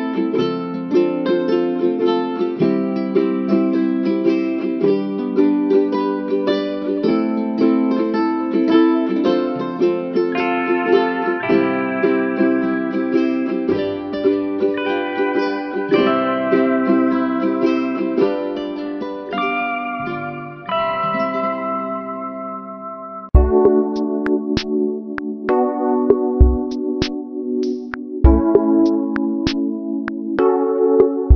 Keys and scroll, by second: 19.6 ctrl+alt+shift+n, 30.4 ctrl+-.